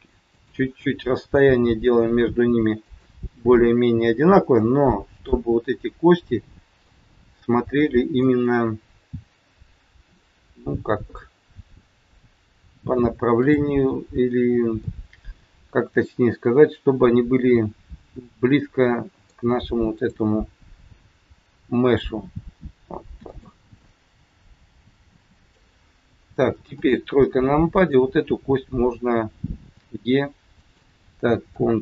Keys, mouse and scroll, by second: 0.2 click, 1.2 g, 3.4 middle click, 4.9 scroll up 3, 5.2 middle click, 7.8-8.2 scroll down 2, 8.4 middle click, 10.6-11.0 scroll down 1, 11.1 middle click, 13.3 click, 14.7 middle click, 20.0 click, 21.9 g, 23.9 middle click, 26.7 KP_3, 27.7 click, 29.7 e, 31.7 ctrl+z.